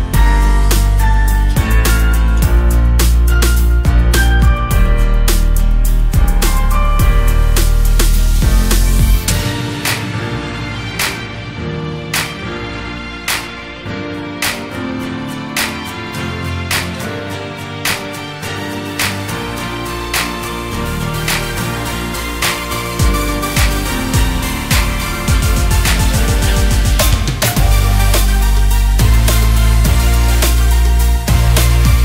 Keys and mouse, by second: 0.4 click, 1.3 click, 1.9-3.1 drag, 3.9 click, 5.0 click, 6.1-6.8 drag, 7.3-9.4 drag, 11.3 click, 12.3-13.3 drag, 22.3-23.9 drag, 27.1 alt+g, 27.1 alt+r, 28.1-29.9 typing, 29.9 KP_Enter.